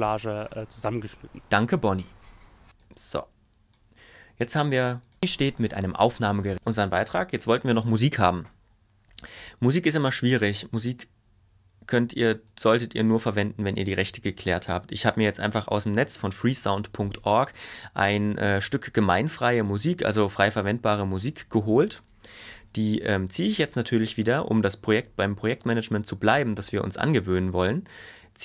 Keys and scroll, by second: 2.6 space, 5.1 space, 6.5 space.